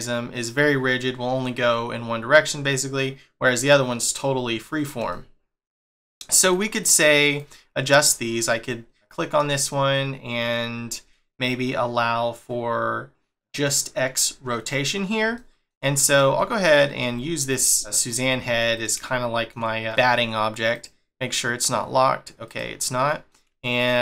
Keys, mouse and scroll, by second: 4.0 scroll down 1, 5.1 shift+middle click, 6.4 click, 6.8 click, 7.3 click, 7.9 click, 8.4-8.9 scroll up 1, 8.9 scroll up 1, 9.1 click, 9.5 shift+middle click, 13.6 click, 15.3 shift+middle click, 16.1 click, 16.3 middle click, 17.0 g, 17.8 middle click, 18.3 g, 19.0 shift+middle click, 19.6 scroll up 2, 20.7 click, 22.4 click, 23.0 middle click.